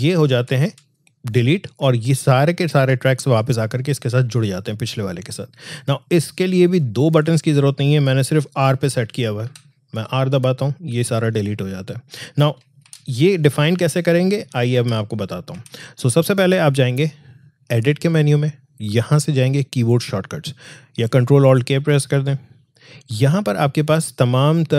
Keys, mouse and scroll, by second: 0.2 ctrl+z, 6.4-9.4 drag, 9.4 r, 12.6 ctrl+r, 12.8 ctrl+z, 14.7 ctrl+z, 17.7 click, 22.1 click.